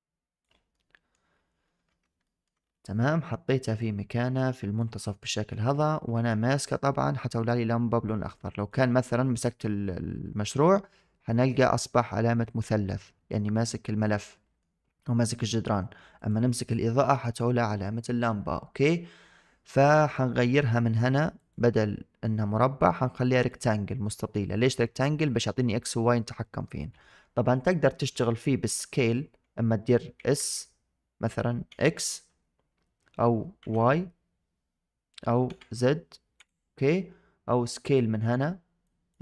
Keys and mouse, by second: 0.6-1.0 middle drag, 2.1 shift+middle drag, 3.6-4.7 drag, 4.9 shift+middle drag, 5.2 middle click, 14.2-14.5 middle drag, 15.3 middle click, 16.0 click, 19.7 middle drag, 21.3-23.4 drag, 30.2 s, 38.7 click.